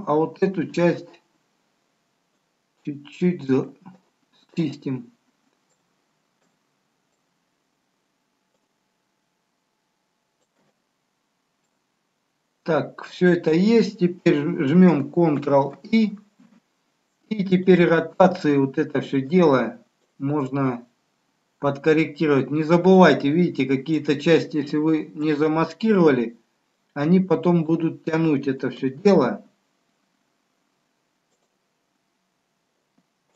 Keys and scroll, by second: 15.5 ctrl+i, 25.1 ctrl+z.